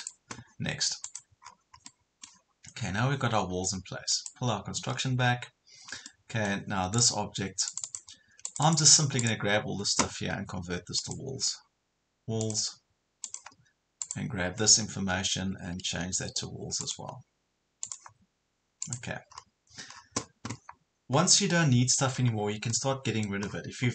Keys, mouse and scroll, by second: 1.4 scroll up 1, 1.9 middle click, 4.1 click, 5.2 scroll up 1, 6.1 middle click, 6.9 click, 19.3 scroll up 1, 19.9 scroll down 1, 21.5 middle click, 22.2 scroll up 1, 22.7 middle click, 23.5 scroll down 1.